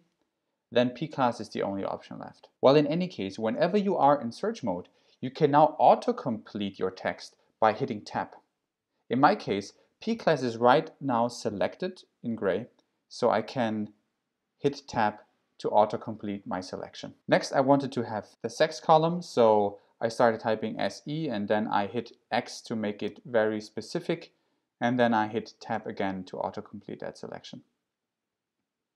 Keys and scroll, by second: 3.5 BackSpace, 14.7 Tab, 18.3 s, 18.7 e, 23.1 x, 25.7 Tab.